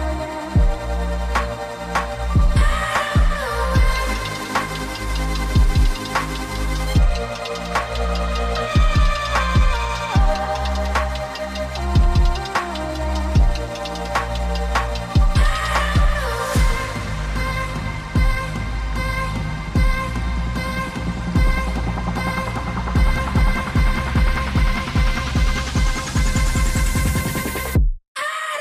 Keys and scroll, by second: 0.9 l, 1.4 v, 6.4-28.6 typing, 6.9 ctrl+x, 7.4 ctrl+f.